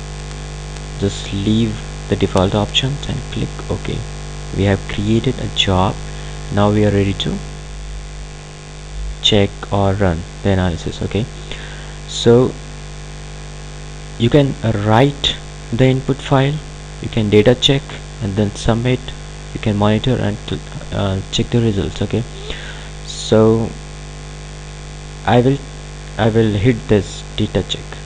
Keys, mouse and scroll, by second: 3.3 click, 5.7-9.8 drag.